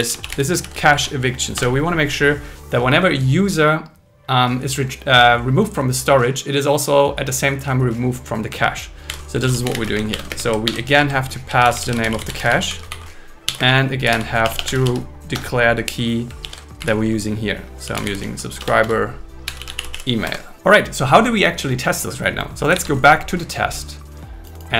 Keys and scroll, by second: 0.6 shift+e, 1.6 Return, 9.1-11.0 typing, 10.6 alt+5, 12.7 Right, 13.6 space, 14.4 BackSpace, 15.4 Return, 16.4 shift+2, 18.6 Return, 18.8 Return, 20.4 Escape, 22.9 super+1.